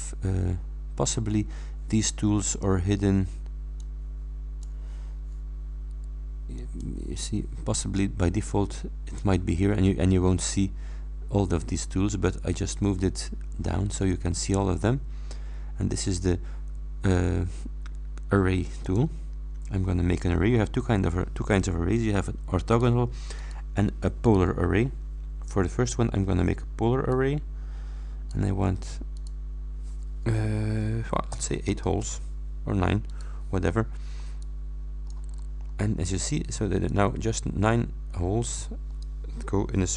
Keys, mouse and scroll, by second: 3.8-4.9 scroll up 1, 6.6-7.0 scroll up 1, 7.2-7.9 scroll up 2, 7.9-9.4 scroll up 1, 12.4-14.2 drag, 18.9 click, 22.8 click, 23.4 click, 24.3 click, 27.2-28.6 drag, 29.2 click, 31.9 shift+Return, 33.2 click, 34.2 click, 34.5 middle click, 35.4-36.0 scroll down 1, 36.3 click, 37.0-39.3 middle drag, 38.4 click.